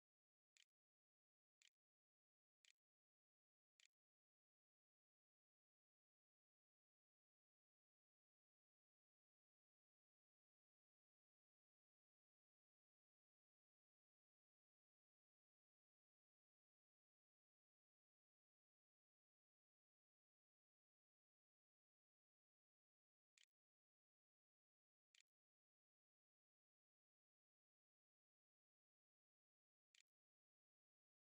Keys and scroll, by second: 0.0-6.2 typing, 22.6 ', 22.6 Return, 23.2 Delete, 24.6-26.2 typing, 28.9-31.2 typing.